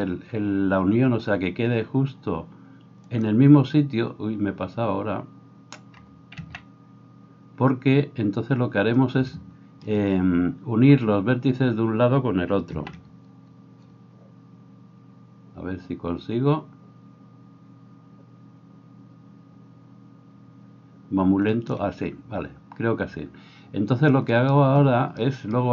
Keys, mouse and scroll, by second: 0.0 s, 7.3 ctrl+z, 13.5 s, 24.4 right click, 24.6-25.7 middle drag.